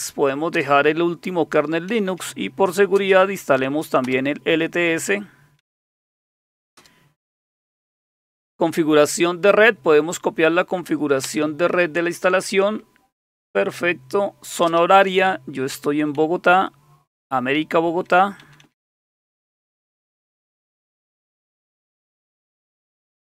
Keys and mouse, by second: 0.5 Return, 1.9 Down, 2.1 Down, 3.0 space, 4.0 Return, 5.6 Down, 6.8 Return, 11.2 Return, 14.7 Return, 16.2 Down, 16.9 typing, 17.0-18.0 Down, 18.4 Down, 18.6 Down, 19.0 Down, 19.9 Down, 20.2 Down, 20.4 Down, 22.0 Down, 22.3 Down, 22.4 Down, 22.6 Down, 22.8 Down, 23.0 Down.